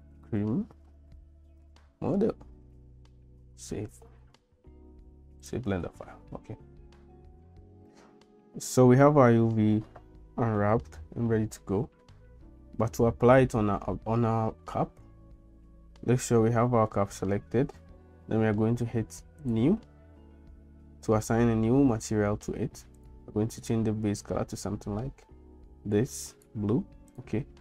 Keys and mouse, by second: 7.5 l, 15.8 Tab, 19.5 click, 23.0 click, 27.1 click.